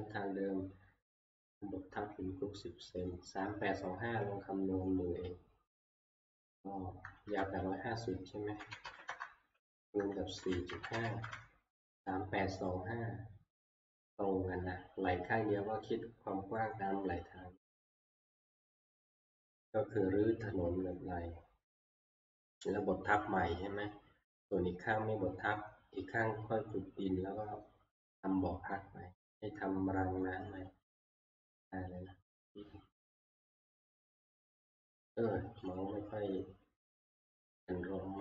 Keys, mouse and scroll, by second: 6.2 click, 6.7-11.2 drag, 8.4-11.4 typing, 33.0 click, 34.8 click, 35.7 click.